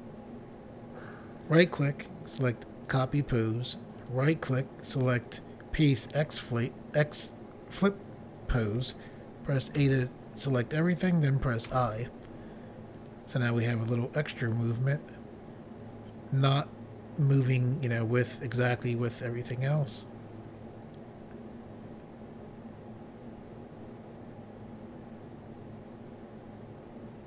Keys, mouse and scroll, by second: 1.4 right click, 1.6 right click, 2.9 click, 3.0 click, 4.1 right click, 6.0 click, 6.2 click, 9.8 a, 11.7 i, 13.0 click, 14.5 click.